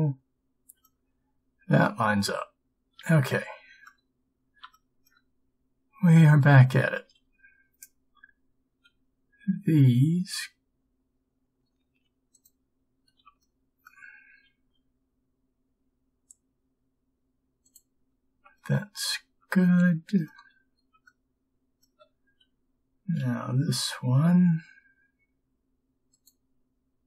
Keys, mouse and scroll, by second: 9.0 g, 14.7 b, 21.1 b, 23.3 g.